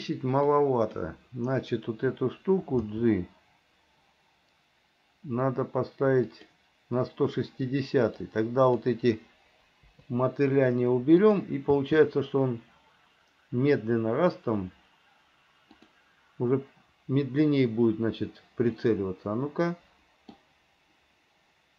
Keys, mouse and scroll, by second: 0.7 click, 3.1 g, 8.4 click, 10.1 Delete, 11.5 click, 11.9 space, 16.0 click, 19.0-20.6 middle drag.